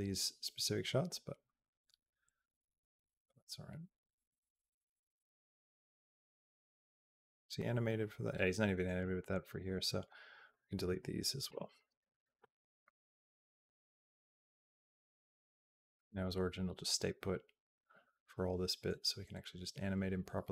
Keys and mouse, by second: 9.8 click, 11.3 Delete, 13.5-20.5 drag.